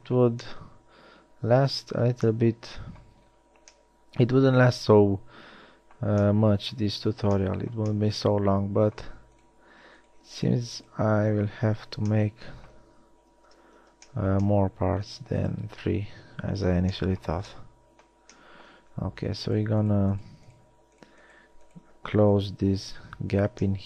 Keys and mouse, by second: 4.1-5.8 middle drag, 6.6-8.6 middle drag, 11.9 f, 13.6 ctrl+z, 16.7 f, 23.2 f.